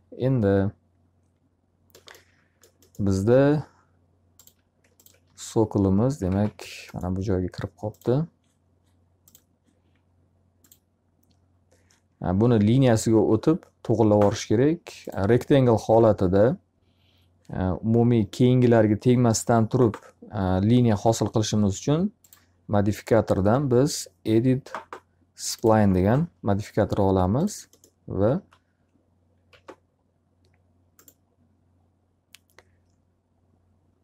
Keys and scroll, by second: 4.8 d, 5.9-6.8 typing, 27.9 s.